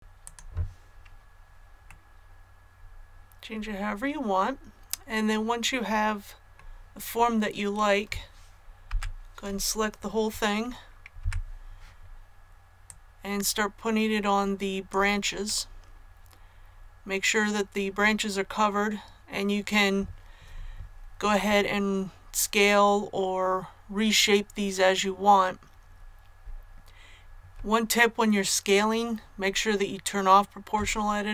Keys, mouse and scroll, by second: 0.2 click, 1.9 middle click, 2.6 scroll up 1, 6.6-8.8 scroll up 1, 11.2 KP_1, 12.8-15.4 drag, 15.4-20.6 middle drag.